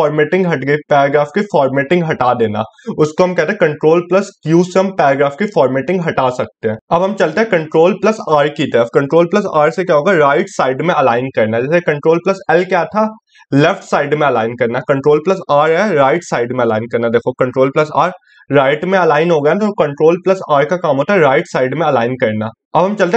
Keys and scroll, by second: 7.4 ctrl+r, 23.0 ctrl+s.